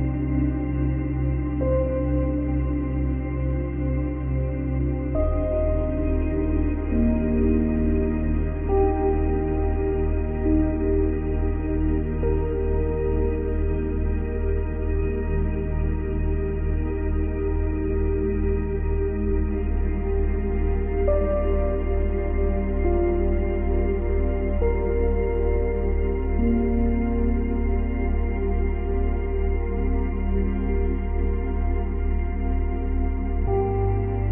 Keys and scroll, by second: 10.3 ctrl+c, 10.6 ctrl+v, 12.2 Delete, 13.1 ctrl+z, 13.9 ctrl+z, 16.4 Delete, 16.9 ctrl+v, 18.8 Delete, 23.6 space, 25.7 space.